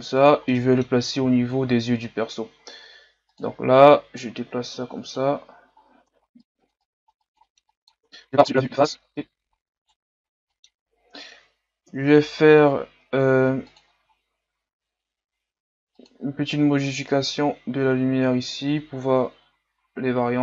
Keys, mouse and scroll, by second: 0.5 middle click, 1.2-3.2 scroll up 6, 3.2 scroll up 1, 3.4 click, 6.0 KP_3, 6.1 scroll up 2, 6.8 click, 7.4 middle click, 7.6 click, 8.0 KP_1, 8.3 scroll down 1, 8.4 scroll up 3, 8.6 click, 9.0 scroll down 1, 9.1 a, 9.5-9.9 scroll up 4, 9.9 right click, 10.2 scroll up 5, 10.5-12.0 middle drag, 12.0 KP_1, 17.0 click.